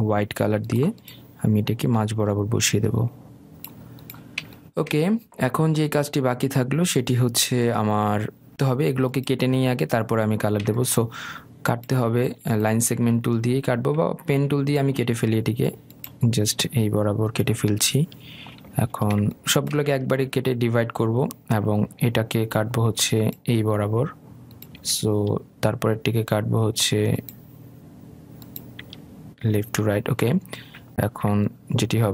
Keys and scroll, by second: 18.8 Escape, 26.0 Escape.